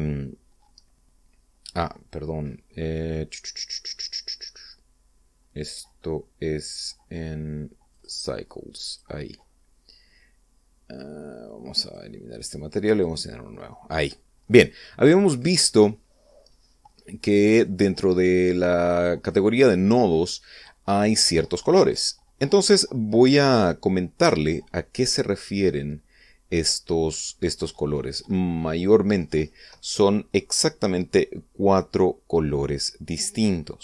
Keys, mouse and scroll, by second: 8.4 click, 9.4 click, 12.4 click, 13.4 click, 14.2 middle click, 15.4 scroll down 1, 18.1-19.6 drag, 19.8-21.3 drag, 23.8 click, 25.8-27.5 middle drag.